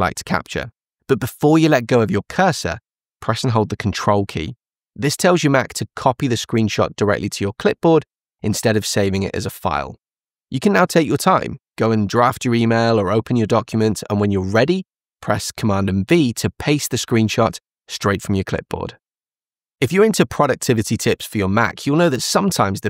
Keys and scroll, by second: 16.7 super+v.